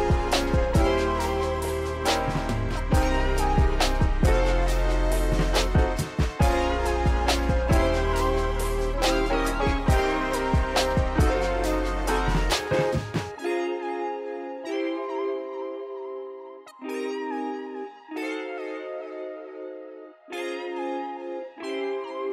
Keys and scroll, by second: 3.2 Return, 9.1 ctrl+alt+shift+c, 10.0 Return, 11.4 ctrl+s.